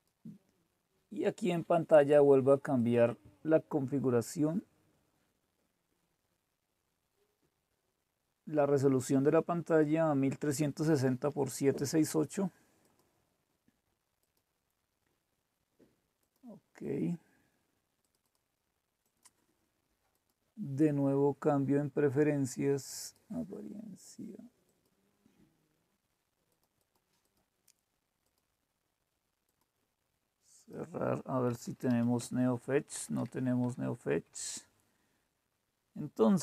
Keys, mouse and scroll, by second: 2.8 click, 5.4-6.0 scroll down 2, 6.2-6.9 scroll up 2, 6.9 click, 9.7 click, 12.8 click, 14.2 click, 16.2 click, 18.1 click, 19.0 right click, 20.0 click, 20.4 click, 23.0-26.3 drag, 26.5 click, 27.2 click, 28.2 click, 29.4 click, 30.5 click, 31.2-33.6 typing.